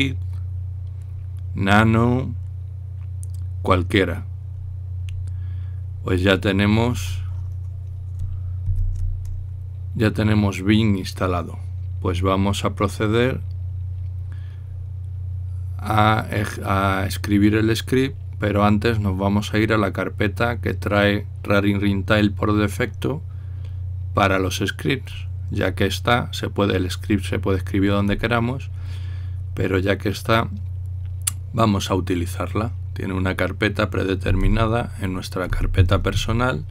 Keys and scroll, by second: 9.5 ctrl+l, 34.9-36.5 typing.